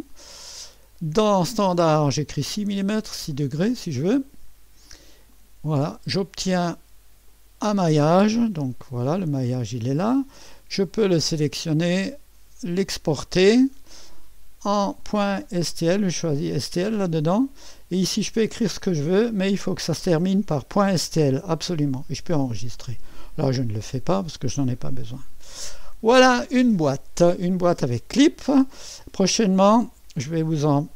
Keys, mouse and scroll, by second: 5.3 click, 7.3 click, 8.6 typing, 10.1 typing, 11.5 click, 12.7-15.1 drag, 16.1-17.4 drag, 23.1 click, 25.2 Delete.